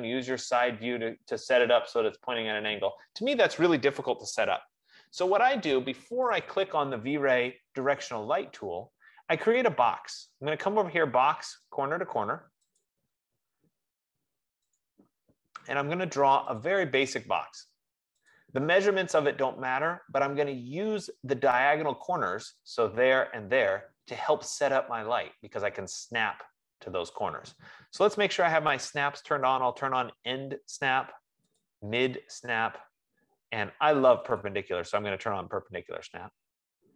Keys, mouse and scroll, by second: 0.8 click, 1.2 F15, 5.3 Escape, 6.5 click, 6.8 click, 13.1 click, 15.1 click, 17.1 click, 18.8 click, 29.7 click, 31.9 click.